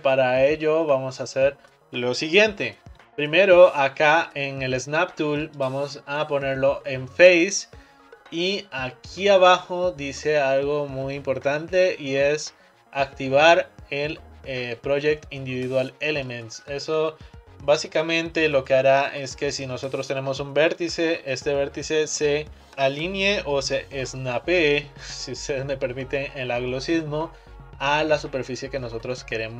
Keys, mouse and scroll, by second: 3.0-4.9 middle drag, 5.4-8.6 drag.